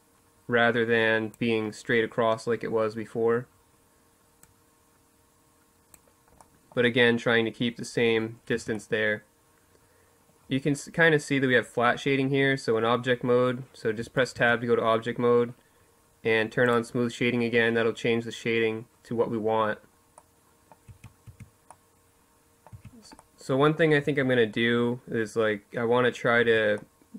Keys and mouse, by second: 3.2-4.9 drag, 5.1 middle click, 5.3-7.0 drag, 7.0 middle click, 7.3 Tab, 7.4 click, 8.7 click, 9.5 click, 10.4 click, 10.8 middle click, 12.7 Tab, 13.1 Tab, 15.4-17.2 drag, 18.2-19.8 middle drag, 19.6 Tab, 20.0 Tab, 21.5 Tab, 22.8 Tab, 25.2 Tab.